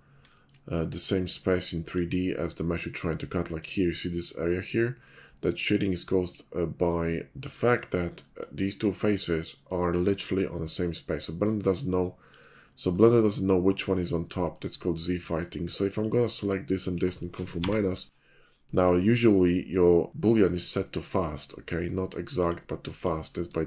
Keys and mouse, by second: 0.3 shift+middle drag, 8.0 middle click, 11.2 middle click, 12.1-13.2 middle drag, 13.3-14.4 middle drag, 15.6-16.1 shift+middle drag, 16.4 shift+click, 17.6 ctrl+KP_Subtract, 20.6 middle click, 22.3 middle click, 23.0 middle click, 23.5-23.6 shift+middle drag.